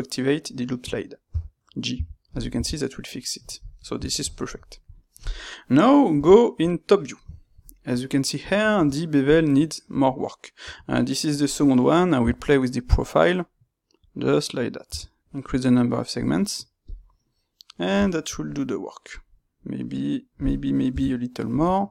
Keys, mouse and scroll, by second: 3.4 click, 3.7-9.2 middle drag, 6.1 KP_7, 9.2 space, 16.8-18.0 drag, 18.0-20.8 shift+middle drag, 20.8 KP_7.